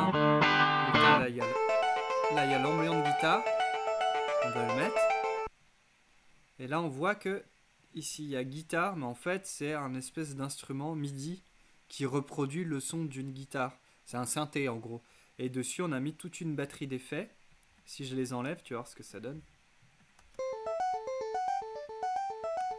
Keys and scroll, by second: 20.3 space, 22.6 space.